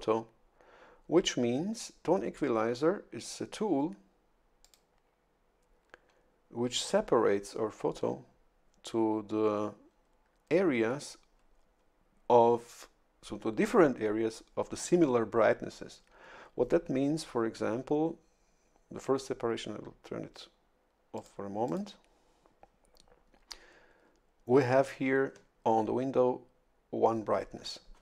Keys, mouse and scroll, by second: 4.6 click, 21.1 click, 21.7 click.